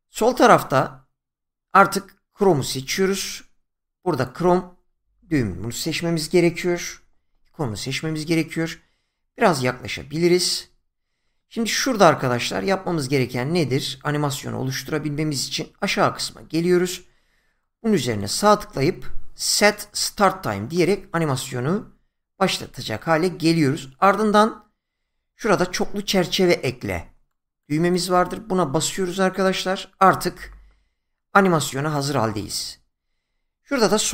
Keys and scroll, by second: 16.2 <, 25.9 <, 34.0 <.